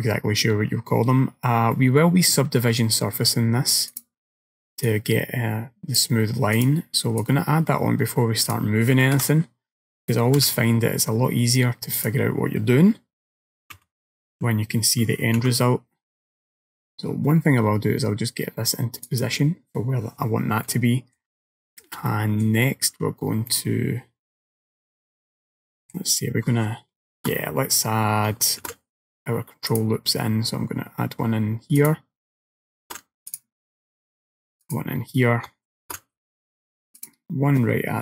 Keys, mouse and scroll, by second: 0.5-1.0 scroll up 2, 1.0-1.5 scroll down 2, 1.8 middle click, 4.0 click, 4.9 click, 6.6 click, 7.3 click, 9.2 KP_1, 10.5 KP_3, 11.2-11.7 scroll up 2, 12.0 click, 13.8 s, 20.7 middle click, 21.5 shift+middle click, 22.1 middle click, 23.6 middle click, 28.7 ctrl+r, 32.9 ctrl+r, 35.9 ctrl+r.